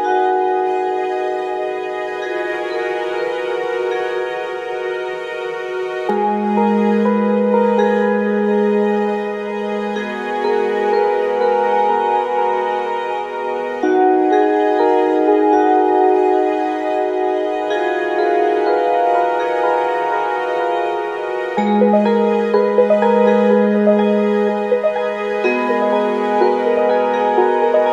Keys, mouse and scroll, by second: 3.2 click, 4.0 ctrl+scroll up 2, 4.6 ctrl+scroll up 2, 5.2 ctrl+click, 7.1 click, 9.8 ctrl+d, 11.5 ctrl+d, 12.8-14.3 shift+drag, 14.6 shift+click, 15.8 ctrl+KP_Subtract, 18.0 ctrl+shift+k, 19.5 click, 20.0 click, 21.9 click, 24.0 shift+click, 25.0 click, 26.3 click, 27.0 shift+click.